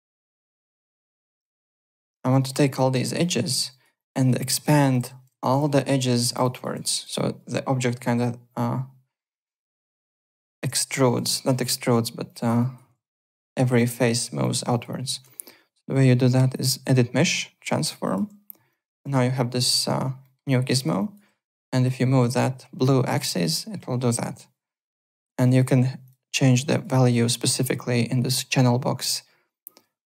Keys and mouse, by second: 0.1 alt+right click, 0.4-1.6 typing, 0.5 click, 1.5 alt+click, 2.4 alt+middle click, 2.6 alt+right click, 2.9 alt+middle click, 3.2 alt+click, 3.7 alt+right click, 3.9 alt+click, 4.3-7.2 typing, 4.5 ctrl+a, 4.8 alt+s, 5.5 click, 6.0 alt+right click, 6.3 click, 6.9 click, 9.6 alt+right click, 10.2 alt+click, 11.4 alt+click, 12.2 alt+click, 12.5 alt+right click, 14.4 alt+click, 14.7 alt+right click, 14.9 alt+click, 16.5 click, 18.0 click, 18.7 alt+click, 20.2 alt+middle click, 20.4 alt+click, 20.7 alt+right click, 20.9 alt+click, 21.8 click, 26.0 click, 26.7 click, 27.4 click.